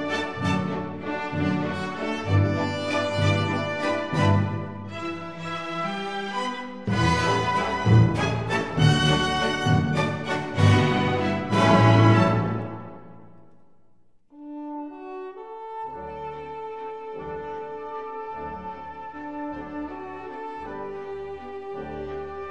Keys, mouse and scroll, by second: 0.5 ctrl+KP_Add, 3.9-5.9 drag, 6.8-8.8 middle drag, 8.8 click, 9.6 middle click, 9.8-12.0 drag, 12.5 KP_1, 12.7 middle click, 12.9-15.8 middle drag, 15.2 e, 18.1-20.4 middle drag.